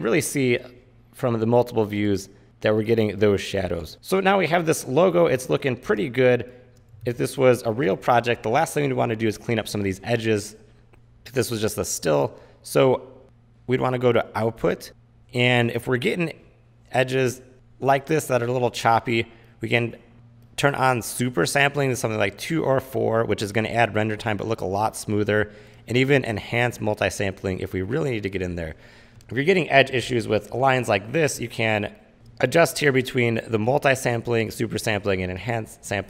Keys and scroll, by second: 3.8 v, 6.0 space, 7.0 super+s, 32.1 space, 33.7 space.